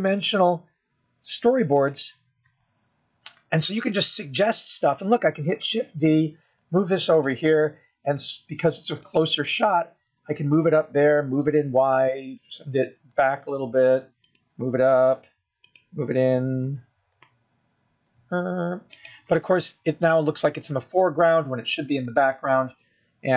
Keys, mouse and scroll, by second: 1.3 g, 8.3 shift+d, 10.2 s, 13.5 g, 17.3 g, 18.6 g.